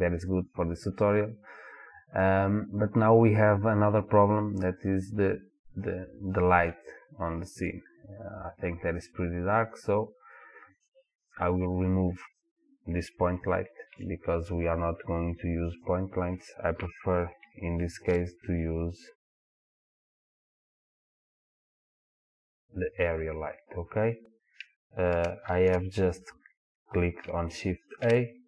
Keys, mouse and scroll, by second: 6.9-11.6 middle drag, 8.4-9.4 scroll down 2, 9.4-11.6 scroll down 1, 11.6 click, 12.3 click, 14.0 Delete, 18.0 shift+a, 25.9 ctrl+z, 28.0 shift+a.